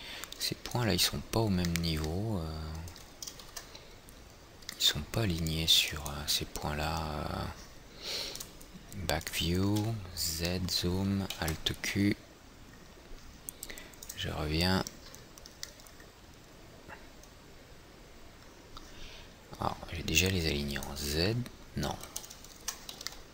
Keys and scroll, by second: 4.0 ctrl+z, 4.5 ctrl+z, 10.3 z, 11.9 alt+q, 23.1 ctrl+z.